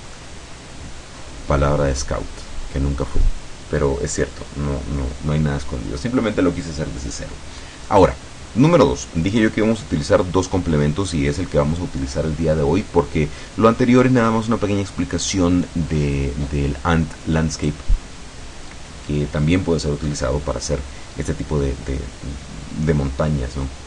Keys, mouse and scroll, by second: 2.0 scroll up 2, 17.7 right click.